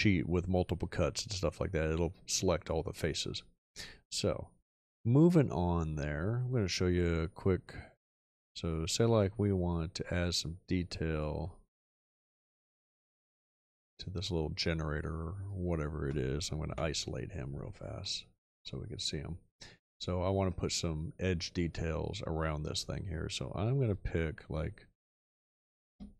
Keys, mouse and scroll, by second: 16.7 ., 25.9 space.